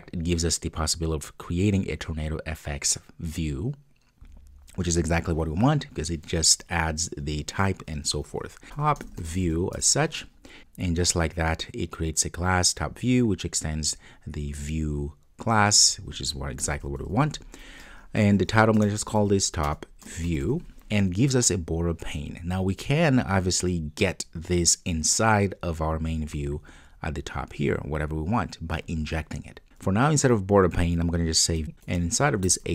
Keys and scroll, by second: 29.7 super+z, 31.6 Return.